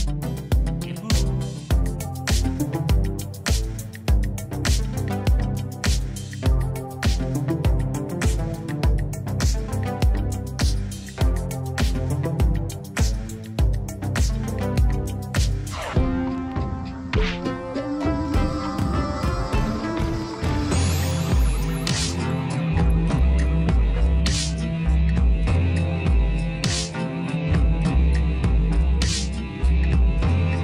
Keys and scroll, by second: 4.8 ctrl+-, 6.4 space, 8.7 ctrl+=, 9.4 space, 11.0 ctrl+-, 18.1 space.